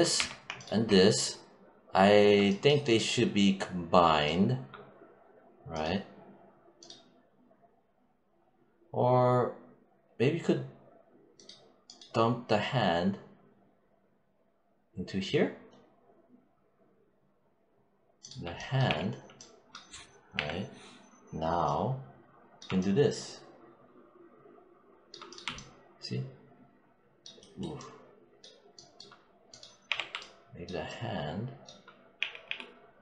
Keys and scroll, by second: 0.0 q, 18.7 e, 20.2 -, 32.0 z.